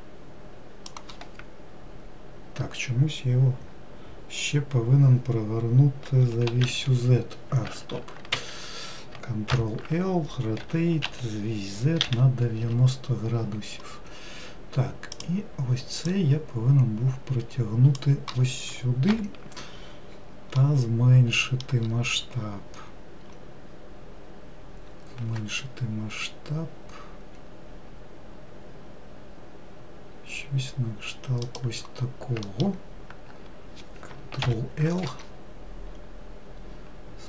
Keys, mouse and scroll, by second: 6.3 r, 9.8 ctrl+l, 10.9 r, 15.4 click, 16.3 click, 19.3 ctrl+l, 20.8-24.0 middle drag, 25.5 s, 32.7 alt+middle click, 34.7 ctrl+l, 36.2-37.2 scroll up 2.